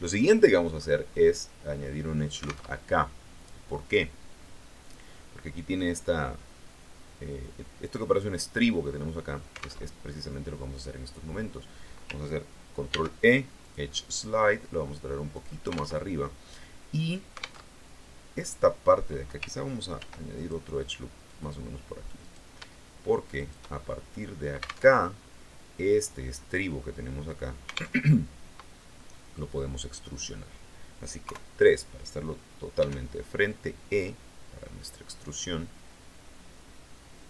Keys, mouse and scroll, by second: 0.1 middle click, 0.9-1.5 scroll up 2, 2.6 alt+Tab, 9.7 alt+Tab, 12.8 ctrl+e, 13.5 click, 15.3 click, 15.9 alt+Tab, 17.6 alt+Tab, 19.9 ctrl+r, 20.3 ctrl+click, 21.2 click, 22.1 right click, 23.3 shift+right click, 24.0-24.5 scroll down 2, 24.8 alt+Tab, 27.9 alt+Tab, 28.9 right click, 31.1 KP_3, 32.7 e.